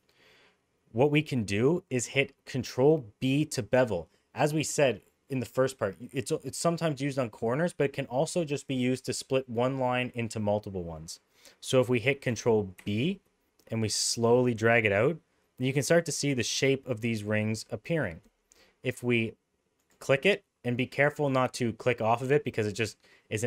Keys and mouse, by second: 12.8 ctrl+b.